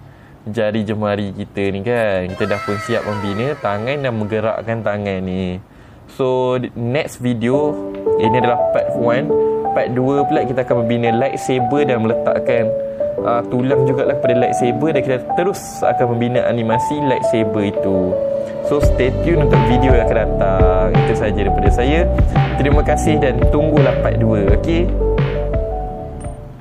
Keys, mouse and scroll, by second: 1.5 middle click, 2.1 click, 2.5 middle click, 2.5-3.4 scroll down 5, 3.4 r, 4.7 right click.